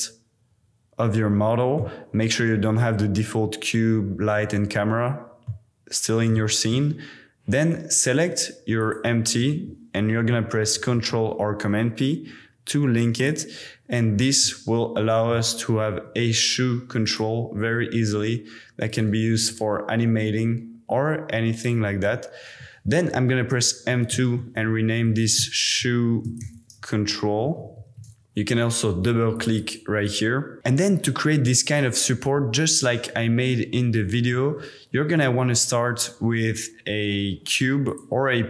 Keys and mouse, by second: 5.5-6.3 middle drag, 8.8 shift+click, 10.9 super+p, 13.1 click, 14.4-15.3 drag, 15.8 g, 17.1 click, 17.4 r, 17.6 r, 17.8 r, 19.3 r, 19.5 r, 21.5 click, 23.6 F2, 27.6 shift+BackSpace, 27.8 shift+BackSpace, 29.3 click, 29.6 click, 35.0 shift+a.